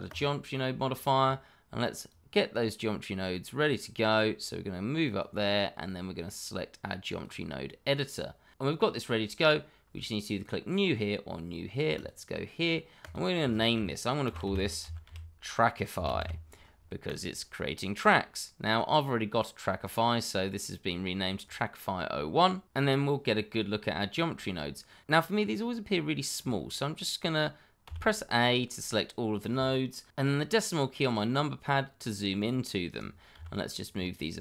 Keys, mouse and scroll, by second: 11.9 click, 14.2-16.2 typing, 17.0 click, 26.3 click, 27.8 a, 30.2 KP_Decimal, 31.6-32.3 scroll down 1, 32.3 click, 33.3 g, 34.1 click.